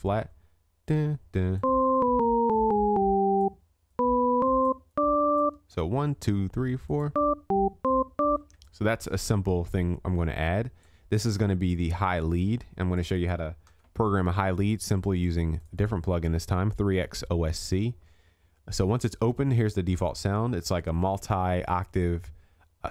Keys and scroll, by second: 13.7 ctrl+s.